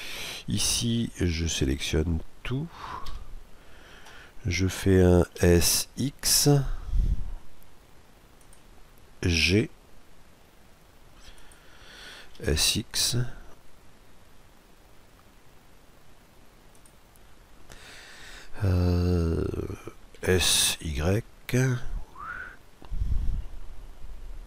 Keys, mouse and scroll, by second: 1.4 a, 2.7 a, 5.0 s, 9.0 g, 12.0 s, 19.9 s.